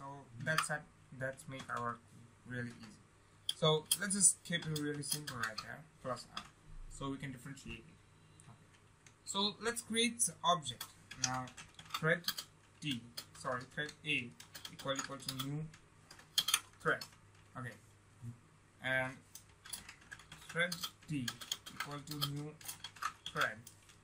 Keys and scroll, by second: 0.4 ctrl+v, 15.6 ctrl+space.